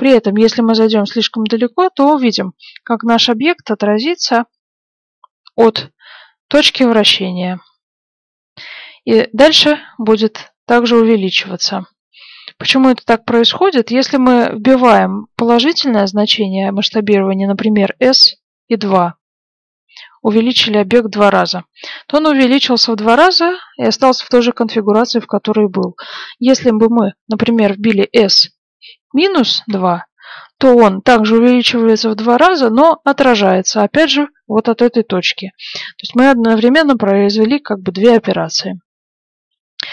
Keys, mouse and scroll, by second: 18.0 s, 25.2 ctrl+z, 28.2 s, 29.4-30.5 middle drag, 34.7-37.4 middle drag, 38.3 ctrl+z.